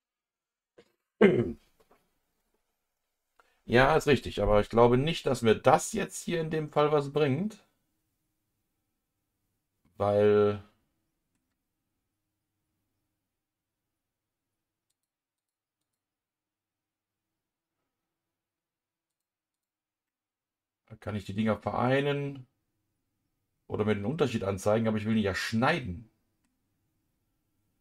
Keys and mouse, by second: 5.0-11.3 middle drag, 14.9 click, 15.3 click, 15.8-19.1 drag, 19.5 click, 20.0-26.4 middle drag.